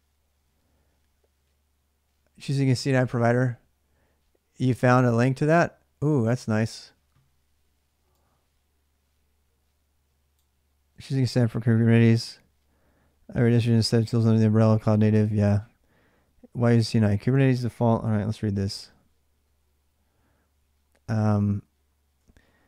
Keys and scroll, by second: 18.3 ctrl+=, 18.8 ctrl+=, 20.4 ctrl+=, 21.4 ctrl+-.